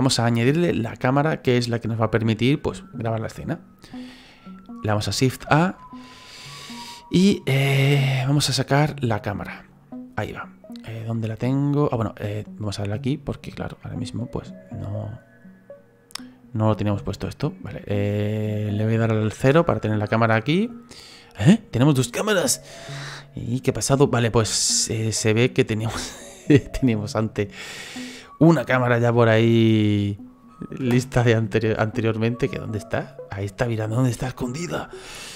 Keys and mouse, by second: 9.4 click, 11.1 middle click, 13.7 click, 14.3 middle click, 17.1 click, 17.9 click, 19.4 KP_0, 27.9 right click, 28.7 right click, 29.5 middle click, 30.8 KP_0, 31.3 middle click.